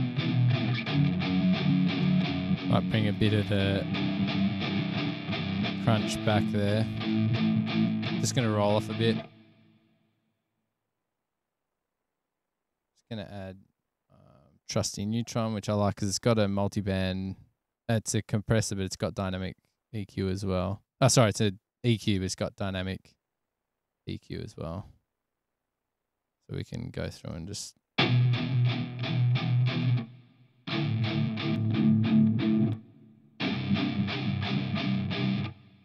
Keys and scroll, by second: 22.2 space, 25.3 super+=, 27.4 space, 27.8 super+=.